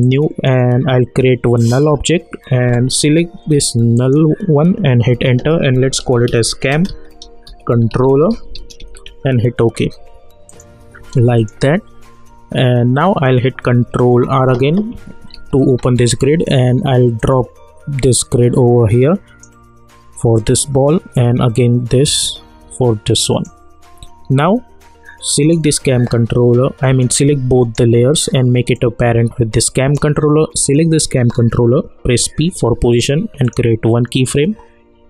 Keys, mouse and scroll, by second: 0.0 click, 3.9 click, 5.1 Return, 5.8-9.3 typing, 10.5 click, 12.5-13.1 alt+scroll up 1, 15.3 ctrl+r, 17.2-25.3 drag, 27.6-30.6 shift+drag, 32.0 p, 33.4 click.